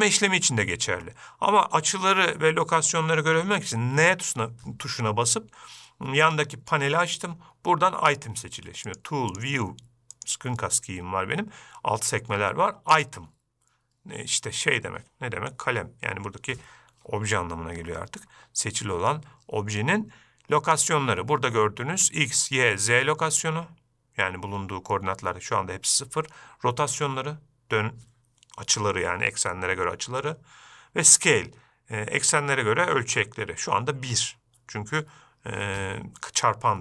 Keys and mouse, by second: 0.7-1.3 shift+middle drag, 4.3 n, 13.3 click.